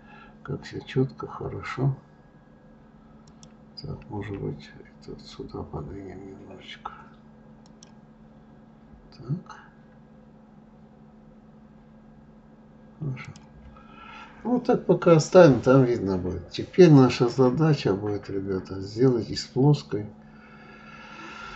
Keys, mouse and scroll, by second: 3.7 click, 4.6 g, 8.8-9.1 scroll up 3, 9.6-10.0 scroll up 1, 13.6 click, 14.2-15.2 scroll down 7, 17.7-20.8 middle drag.